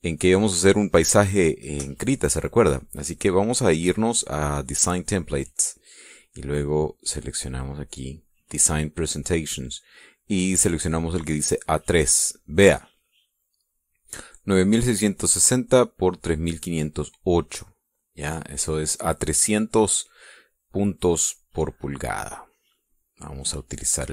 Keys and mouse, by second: 7.8-9.0 drag, 12.6 click, 22.9 click.